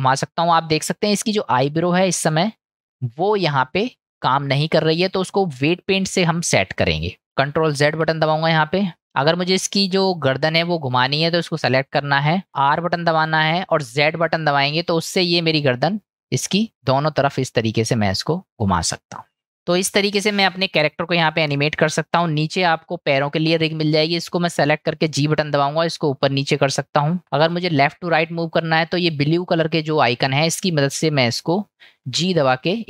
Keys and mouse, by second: 5.5 click, 8.2 ctrl+z, 19.4 click, 19.4 ctrl+z, 19.8-20.6 middle drag, 21.7-22.0 shift+middle drag, 22.8 middle click, 23.8 click, 28.2 click, 28.8-29.9 middle drag, 30.9-31.4 middle drag.